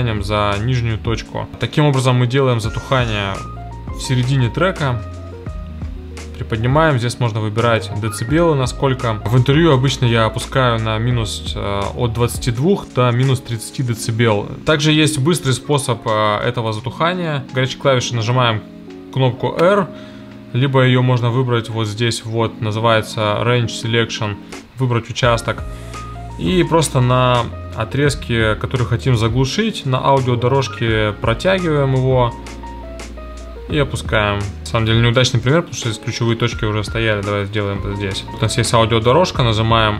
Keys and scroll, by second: 1.5 space, 34.6 super+z, 36.3 a, 39.1 r.